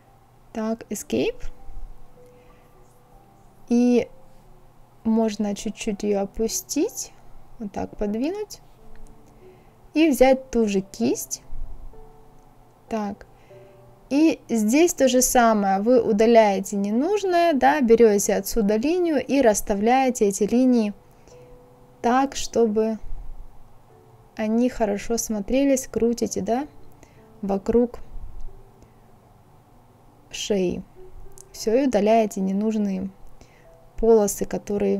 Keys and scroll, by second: 0.7 Escape, 17.1 ctrl+c, 17.7 ctrl+v, 23.5 ctrl+z, 23.9 ctrl+z, 32.0 ctrl+z.